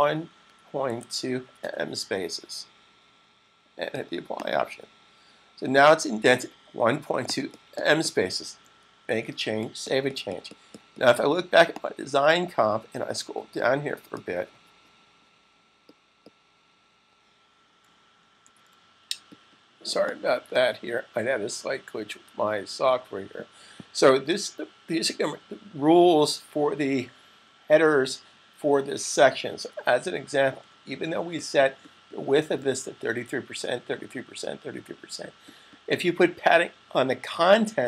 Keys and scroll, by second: 0.0-1.9 typing, 8.8 super+s, 30.2 super+s.